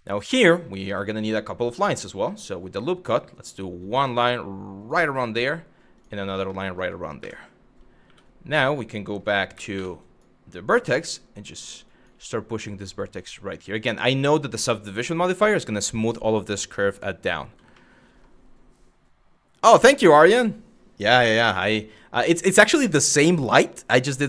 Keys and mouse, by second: 2.0 click, 2.8 click, 5.6 click, 6.2 shift+middle click, 6.8 1, 7.7 2, 9.7 click, 11.2 click, 11.5 click, 11.7 g, 13.3 click, 17.4 shift+middle click.